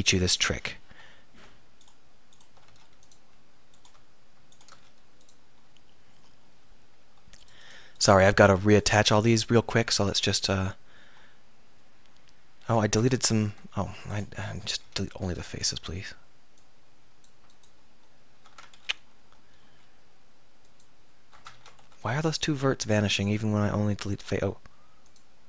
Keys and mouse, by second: 2.7 x, 4.8 x, 6.3-8.1 middle drag, 9.9 x, 12.9 ctrl+z, 13.2 ctrl+z, 13.9 middle click, 14.9 x, 18.8 ctrl+z, 19.7 x, 21.6 ctrl+z, 21.9 x.